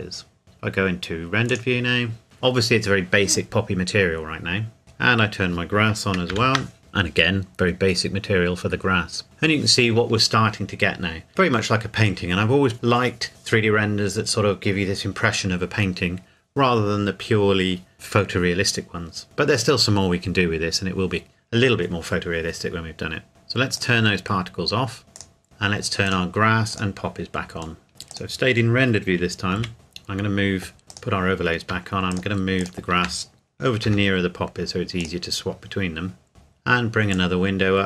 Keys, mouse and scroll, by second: 1.5 click, 4.8-6.2 scroll up 1, 6.3 ctrl+s, 23.8 click, 26.0 click, 27.8 shift+middle click, 28.1 click, 29.6 KP_Decimal, 29.7-30.9 scroll up 1, 30.9 click, 32.2 shift+click, 33.8 g, 35.0 click, 36.3-37.2 scroll up 1, 37.2 click.